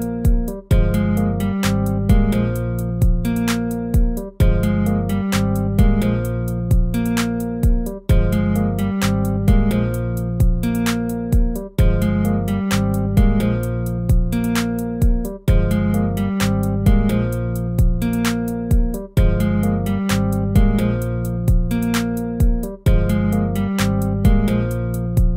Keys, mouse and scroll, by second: 5.4 ctrl+-, 5.7 ctrl+-.